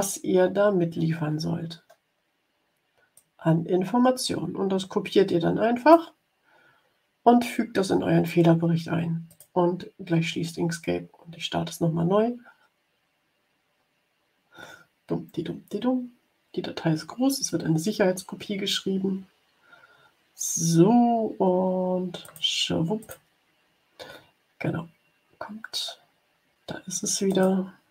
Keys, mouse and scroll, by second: 3.1-6.0 drag, 9.2 click, 22.2 click, 22.9 click, 27.2 click.